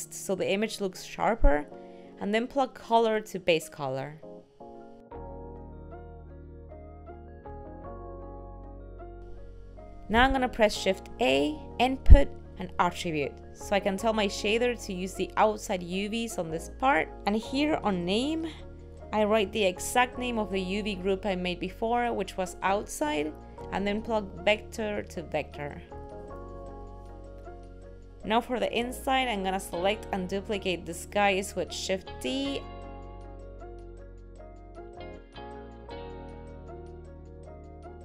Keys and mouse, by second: 24.9 click, 30.1 click, 31.0 click, 32.0 click.